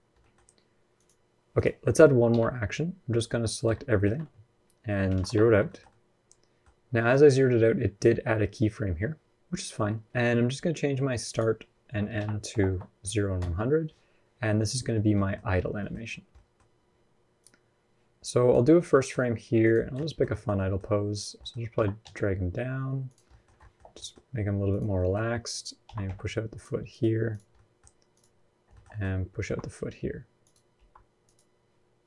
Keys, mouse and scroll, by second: 0.0 middle click, 0.7 click, 1.3 click, 2.1 q, 3.8 a, 4.8 alt+r, 4.9 alt+g, 5.4 shift+middle click, 5.6 middle click, 9.7-10.0 scroll down 1, 11.1 click, 12.4 KP_0, 14.5-15.1 scroll down 23, 14.9 middle click, 15.1-16.4 scroll up 13, 15.5 middle click, 16.1 middle click, 16.4-16.7 scroll down 1, 17.2 click, 17.2 scroll down 1, 18.5 scroll up 2, 18.7 middle click, 19.4 click, 19.7 shift+middle click, 20.1 middle click, 20.3 middle click, 20.9 click, 21.1 middle click, 21.5 g, 23.0 middle click, 23.4 shift+middle click, 23.7-24.4 scroll up 1, 24.4 middle click, 24.4 click, 24.7 middle click, 25.6 g, 26.7 click, 27.1 click, 27.3 middle click, 27.9 click, 28.5 shift+middle click, 28.6 middle click, 29.2 r, 30.5 g, 31.8 click.